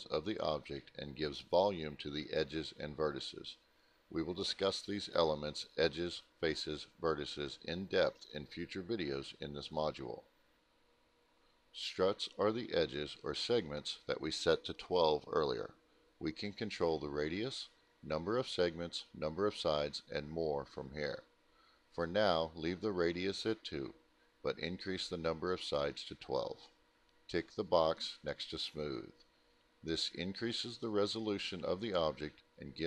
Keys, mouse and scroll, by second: 1.2 middle click, 2.8 middle click, 4.1 middle click, 4.4 middle click, 4.7 ctrl+alt+middle click, 5.4 middle click, 18.2 click, 22.1 click, 24.9 click, 26.2 1, 27.9 click, 28.6-29.5 typing, 30.6 Return.